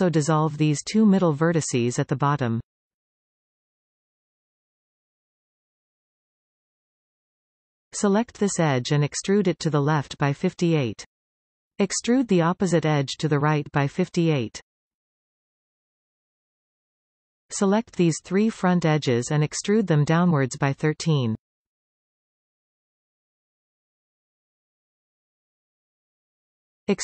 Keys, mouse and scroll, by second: 0.3 click, 0.9 shift+click, 1.7 x, 4.2-7.2 middle drag, 7.2 click, 8.2 click, 8.5 scroll down 1, 10.3 e, 13.3-14.3 middle drag, 14.3 click, 15.1 e, 17.0-18.4 middle drag, 18.4 click, 19.2 shift+click, 19.4 shift+click, 20.0 shift+middle click, 20.9 e, 24.5-27.0 middle drag.